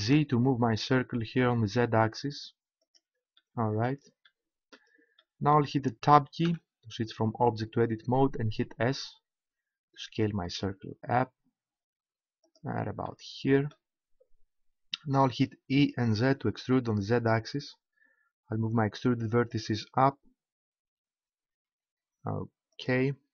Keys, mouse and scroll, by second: 2.9-4.7 drag, 6.4 Tab, 8.5 s, 9.7 s, 9.8 s, 12.5-14.2 drag, 15.8 e, 22.8-23.3 drag.